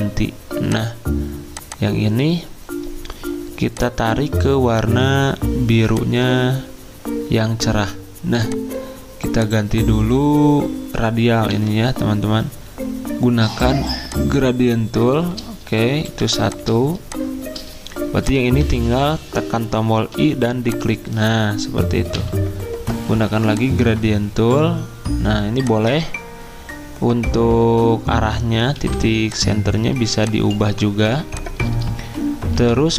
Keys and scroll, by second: 11.5 g, 16.1 v, 18.6 ctrl+z, 20.1 i, 22.1 g, 28.7 v, 29.9 z, 31.1 space, 32.5 v.